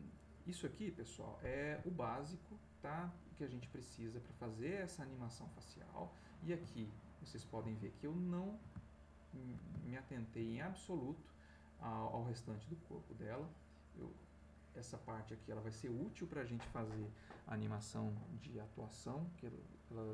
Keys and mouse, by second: 2.7-3.9 ctrl+middle drag, 4.3-6.2 drag, 7.7-8.7 ctrl+drag, 9.3 shift+middle click, 10.0 ctrl+click, 11.2-15.8 drag.